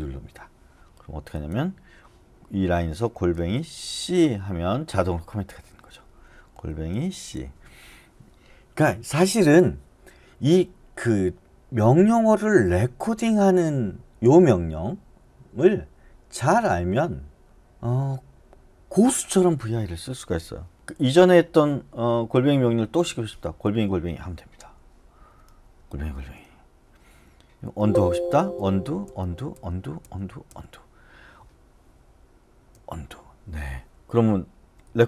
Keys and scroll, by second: 3.2 shift+2, 4.0 c, 5.2-7.6 typing, 20.7 Down, 23.7 @, 23.8 @, 25.9 Up, 25.9 @, 26.1 x, 27.6 Escape, 28.5 u, 29.0 x, 32.7 u, 34.6 Down, 34.9 Down.